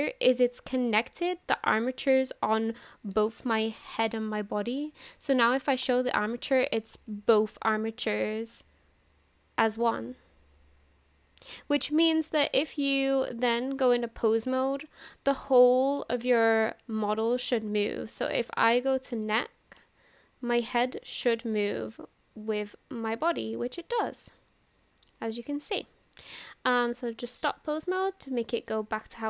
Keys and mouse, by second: 0.1 middle click, 1.1 shift+middle click, 5.9 click, 7.1-11.5 middle drag, 11.9 middle click, 13.8-15.2 drag, 16.5 drag, 18.0 shift+middle click, 21.0-26.1 drag, 27.2 click, 28.1-28.4 shift+middle drag, 28.6-29.2 middle drag.